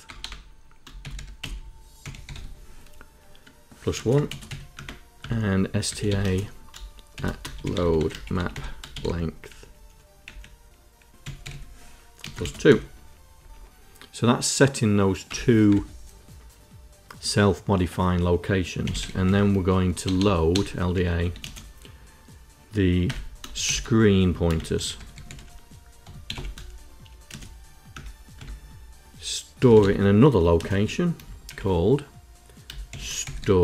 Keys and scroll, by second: 0.0-2.6 typing, 3.9 space, 4.2 space, 4.4 KP_1, 4.7 Return, 5.1 Tab, 5.5-12.5 typing, 13.2 Return, 15.2 Return, 15.5 Tab, 18.5-21.3 typing, 23.5-26.7 typing, 27.8 Return, 29.2-31.3 typing, 32.7-33.6 typing.